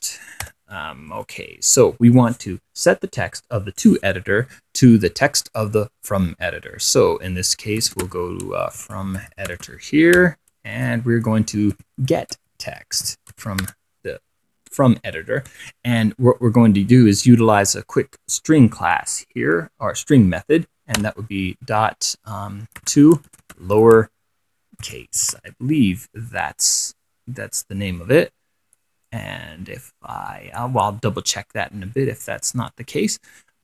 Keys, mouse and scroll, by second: 0.7-1.9 typing, 7.3-14.4 typing, 22.8-26.1 typing, 27.0 click, 29.3-33.6 drag.